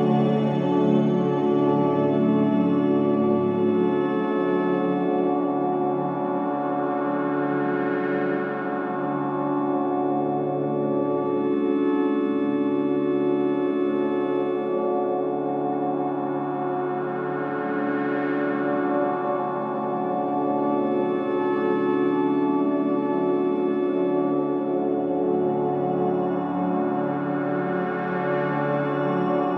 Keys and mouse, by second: 1.7-2.4 typing, 1.7-2.7 drag, 2.8-3.7 drag, 4.4-7.3 drag, 7.4 click, 8.5-10.5 drag, 10.2-11.8 typing, 11.0 ctrl+alt+click, 13.1-20.8 drag, 21.6-22.5 drag, 22.6-24.0 drag, 25.1-27.0 shift+drag, 27.3-29.5 drag.